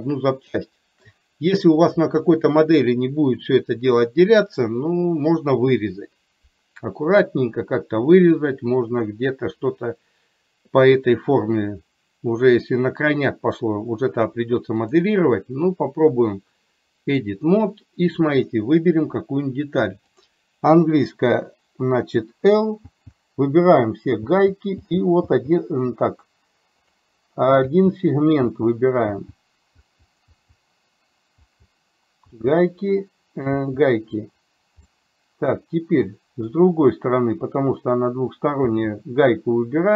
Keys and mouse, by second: 15.1-17.4 drag, 31.5 l, 34.9-36.7 middle drag.